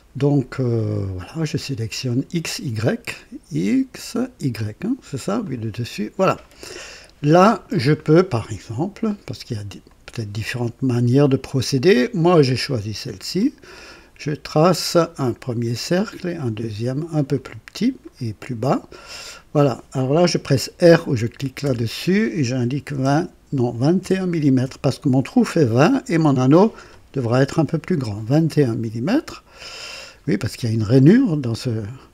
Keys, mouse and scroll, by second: 5.3 click, 6.8-7.8 right drag, 9.8 click, 12.1 click, 13.3 click, 15.6 click, 17.3 click, 18.0 right click, 19.1 click, 21.6 r, 22.8 KP_2, 23.0 KP_0, 23.9 BackSpace, 24.6 KP_1, 29.5 click.